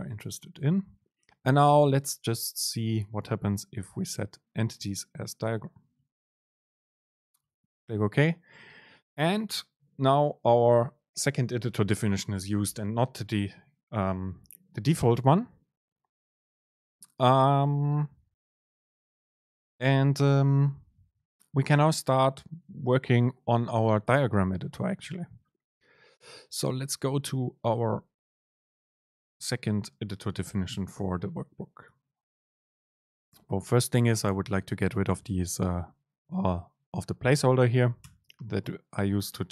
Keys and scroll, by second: 33.8 shift+Down, 37.4 shift+Down, 38.1 BackSpace.